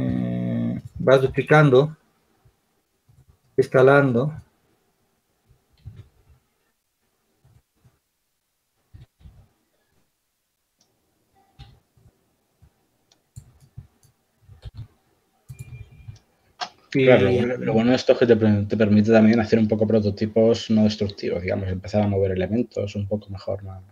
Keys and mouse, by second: 1.3 s, 5.6 shift+d, 9.0 s, 11.4 s, 13.2-14.9 drag, 14.9 r, 15.8 shift+d, 19.6 shift+d, 20.6 r.